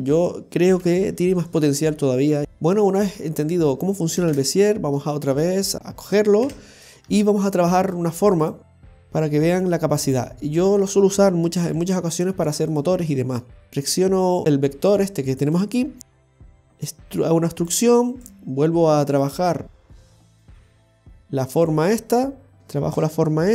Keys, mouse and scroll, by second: 0.1 right click, 0.8 Delete, 2.4 click, 4.2 shift+a, 5.7-6.2 scroll up 2, 6.4 Tab, 7.1 shift+middle click, 8.4 right click, 9.5 g, 10.8 right click, 11.6 g, 12.8 right click, 13.6 g, 13.7-14.4 scroll down 1, 16.3 e, 18.1 right click, 19.0 right click.